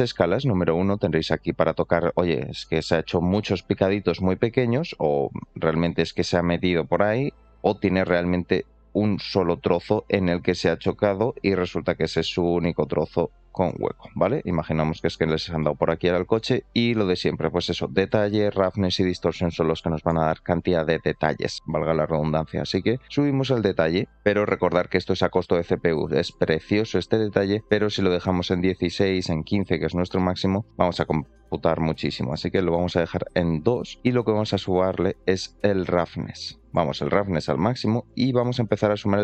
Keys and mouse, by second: 3.3 middle click, 4.3-5.7 drag, 7.5-13.6 drag, 13.9-14.3 middle drag, 15.5 middle drag, 16.5 shift+middle click, 17.0 middle click, 18.3 shift+middle click, 23.0-24.6 drag, 25.4 alt+middle click, 26.3 middle click, 27.7-28.8 drag, 32.2 click, 34.5 click, 38.3 shift+click.